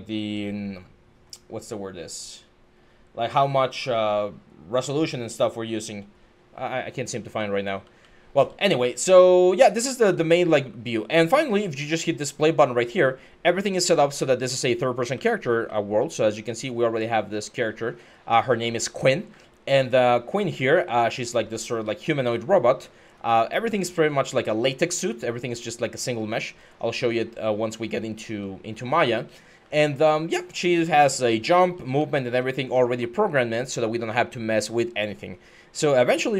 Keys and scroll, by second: 6.9-8.1 typing, 9.6-10.3 typing, 14.9-22.8 typing, 24.8 a, 25.3 a, 25.7 w, 25.7 d, 27.3-36.3 typing.